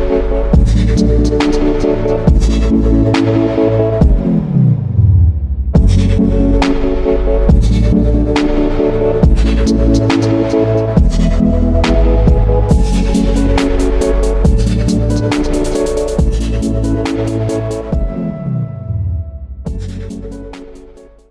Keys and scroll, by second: 2.4-3.6 typing, 5.0 2, 7.2 alt+shift+super+e.